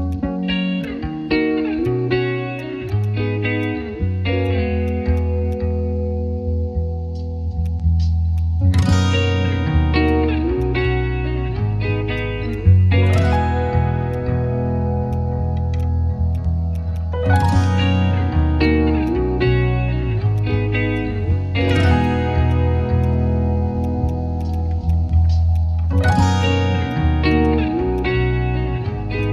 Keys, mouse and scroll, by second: 0.1 shift+click, 2.8 right click, 10.6 shift+click, 12.5 shift+click, 14.1 shift+click, 17.5 shift+click, 20.9 shift+click, 24.4 right click, 27.3 right click.